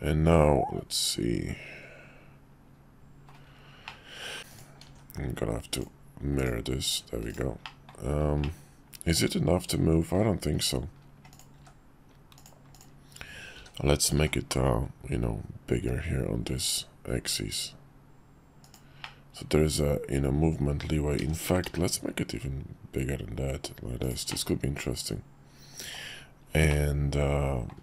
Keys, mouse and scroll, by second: 3.8 middle click, 4.8 alt+x, 5.7 click, 6.4 click, 7.3-8.0 drag, 8.4-10.1 middle drag, 11.5 q, 13.5 s, 19.1-20.8 middle drag, 21.2 s, 24.4-26.0 middle drag, 26.7-27.7 middle drag.